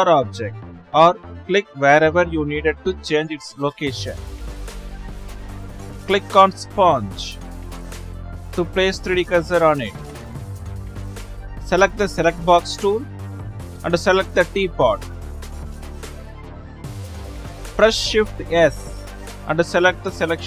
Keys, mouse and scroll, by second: 0.3 click, 2.1 click, 2.7 click, 3.2 click, 4.4 click, 5.4 click, 6.1 click, 7.1-9.4 middle drag, 9.4 click, 10.0-10.8 middle drag, 10.8-13.4 drag.